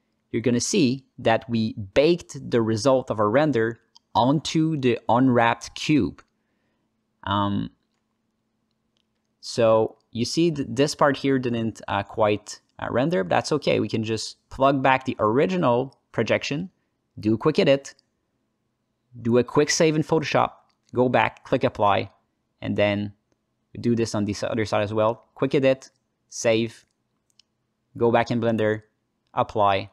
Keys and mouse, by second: 2.0-2.4 ctrl+alt+middle drag, 3.1 ctrl+space, 3.4 ctrl+alt+middle click, 4.3-4.7 ctrl+middle drag, 6.6 ctrl+space, 8.3-9.3 alt+middle drag, 9.7 alt+middle click, 10.6 alt+middle click, 10.9 ctrl+alt+middle click, 12.9 click, 13.4 alt+middle click, 14.1-14.6 drag, 15.2 alt+shift+middle click, 17.2-18.8 drag, 22.2 alt+middle click, 23.2 alt+shift+middle click, 23.5 alt+middle click, 24.1-25.7 drag, 29.6 alt+middle click.